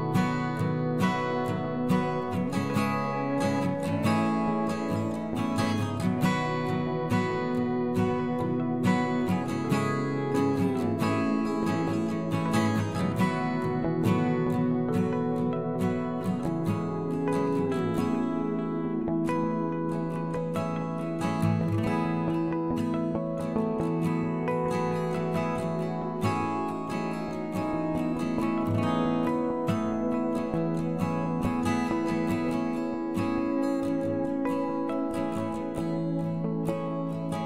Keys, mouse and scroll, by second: 11.1-12.2 drag, 14.9 middle click, 24.4 Delete, 31.2 right click, 35.8 g.